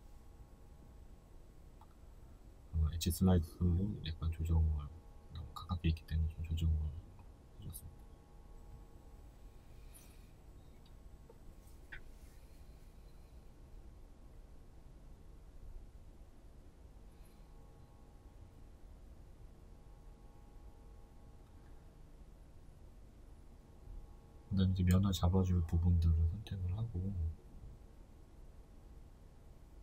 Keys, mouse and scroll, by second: 0.9 space, 9.4 right click, 9.6 alt+right click, 10.6-22.2 middle drag, 12.6 space, 14.2-14.5 scroll, 14.5 Tab, 15.6 scroll up 2, 16.1-17.2 scroll up 2, 17.2 z, 18.0 scroll down 1, 18.9-19.7 scroll up 1, 20.5 Tab, 22.2 right click, 22.5-23.9 middle drag, 23.9 right click, 24.1 alt+right click, 25.7-28.3 middle drag, 28.3 alt+shift+right click, 29.3 shift+right click.